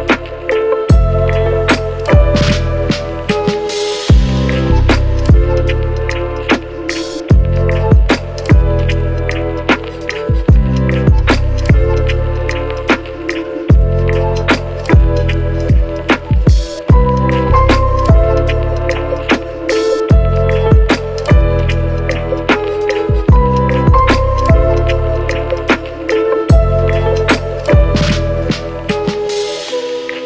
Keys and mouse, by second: 0.0 shift+n, 0.1 shift+d, 0.3 m, 1.7 click, 2.4 a, 2.6 click, 3.0 shift+d, 3.6 shift+m, 6.0 a, 6.2 a, 6.6-9.2 drag, 9.7 a, 10.0-11.9 drag, 13.4 a, 14.1 KP_1, 14.2 g, 16.1 g, 16.5 middle click, 17.0 a, 17.2 click, 17.8 g, 18.6 g, 19.4 shift+middle click, 20.2 KP_1, 20.3 g, 21.6 shift+middle click, 22.4 g, 23.8 a, 24.1 click, 25.1 click, 26.3 middle click, 26.6 click, 26.6 a, 26.7 middle click, 26.9 click, 28.1-30.1 drag.